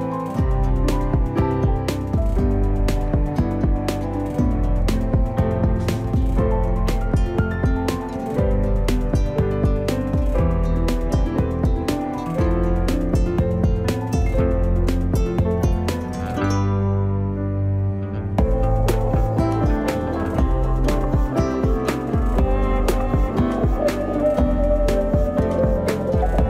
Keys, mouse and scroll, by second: 0.9-3.2 drag, 3.8 w, 5.0 z, 8.1-9.4 drag, 11.2 w, 11.3 scroll down 1, 11.6-13.3 shift+middle drag, 13.3-13.7 scroll up 1, 13.7 shift+middle click, 14.3-15.6 scroll up 1, 15.6 scroll up 1, 15.8-18.2 drag, 20.2-22.6 drag, 24.4-26.4 drag.